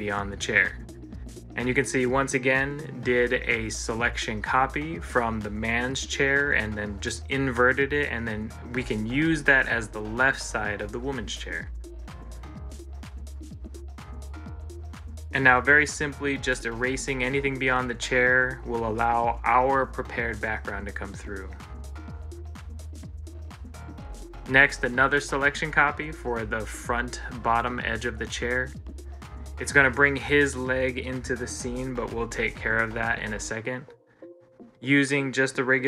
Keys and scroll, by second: 2.5 ctrl+z, 9.0 ctrl+s, 18.3 ctrl+s, 21.5 ctrl+c, 21.9 ctrl+l, 31.7 ctrl+z, 33.0 ctrl+z, 33.6 ctrl+z, 34.8 ctrl+z.